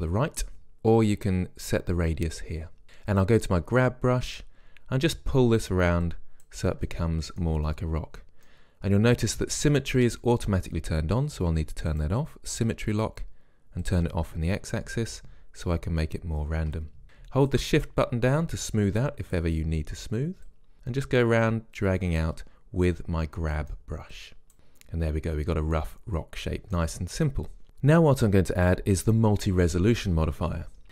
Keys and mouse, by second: 0.8 click, 2.1-8.0 drag, 7.0-11.0 middle drag, 12.1-13.9 drag, 14.7 click, 15.0-16.2 middle drag, 16.2-18.9 drag, 18.9 middle click, 19.1-23.7 drag, 23.7 middle click, 24.3-25.5 drag, 25.5 middle click.